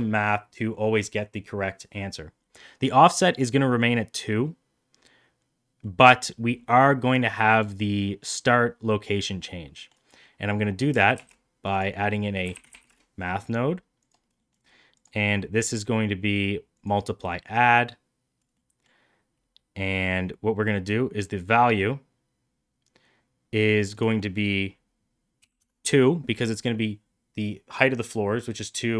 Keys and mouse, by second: 3.2 middle click, 5.9 middle click, 9.8 middle click, 11.1 shift+a, 15.0-16.8 drag, 17.6 middle click, 18.6 middle click, 23.8-28.9 drag.